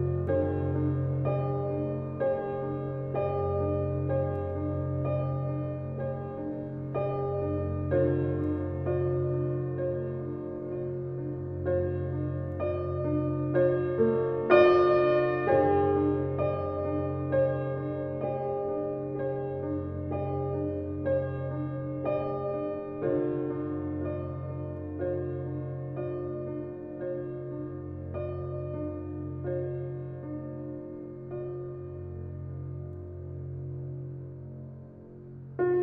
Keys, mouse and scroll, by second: 0.3-2.5 shift+right drag, 2.5 scroll down 1, 2.8 alt+click, 3.4 w, 4.4-6.5 drag, 6.5 scroll up 1, 7.2 alt+click, 9.1 scroll up 1, 9.4 alt+click, 13.1 alt+click, 13.5 alt+right click, 14.0 alt+click, 14.3 alt+middle click, 14.8 r, 15.5-18.3 drag, 18.3-20.4 alt+drag, 20.8 w, 21.4 click, 22.3 alt+right click, 22.6-24.0 alt+drag, 24.0 e, 25.0 click, 26.0-27.4 typing, 27.6 click, 29.0 ctrl+z, 30.0 click, 31.1 w, 32.3 click, 32.7 typing, 33.5 click, 33.6 click, 34.3-35.8 alt+drag.